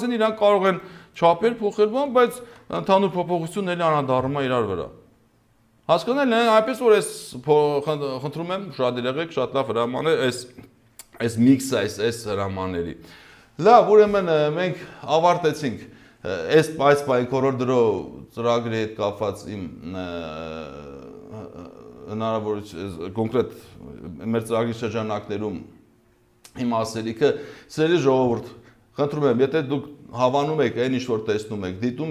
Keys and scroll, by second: 2.3 ctrl+z.